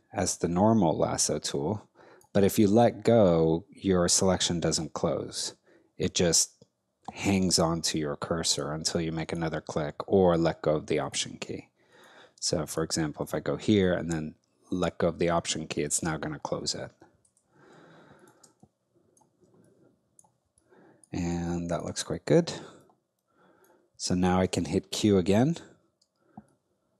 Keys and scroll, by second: 17.3 alt+BackSpace, 18.4 alt+space, 25.0 q, 26.0 space.